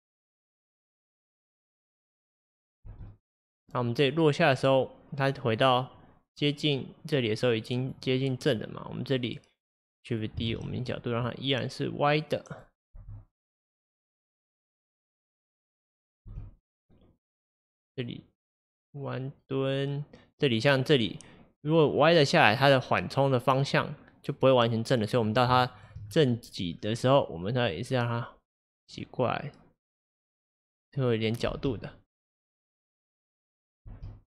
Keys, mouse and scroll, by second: 2.9 space, 3.3-6.4 drag, 9.6-10.6 drag, 10.6 shift+d, 13.0 space, 16.3 space, 16.4-19.4 drag, 25.7-26.1 shift+middle drag, 26.1-27.1 scroll up 2, 27.1 click, 31.5 space, 33.9 space.